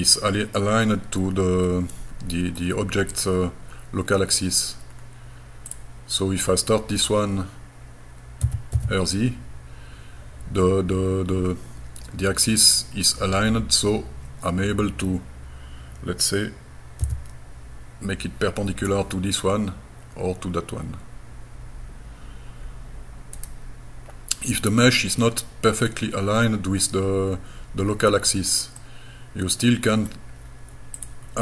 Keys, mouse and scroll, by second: 1.6 middle click, 3.1 click, 4.1 scroll down 2, 4.6 scroll up 1, 5.0-5.7 scroll down 2, 5.7 click, 6.4-7.0 scroll down 2, 7.0 scroll up 4, 8.5 r, 17.0 p, 23.4 right click, 24.1-24.5 scroll down 2, 27.3 scroll down 2, 27.9-28.8 scroll up 4, 28.8-30.1 middle drag, 30.4 scroll up 2, 31.0 click.